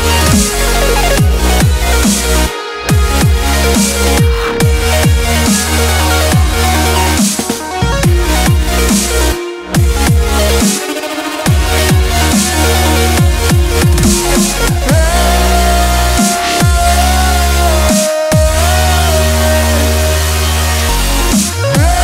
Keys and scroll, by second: 8.1 ctrl+t, 17.2 ctrl+t.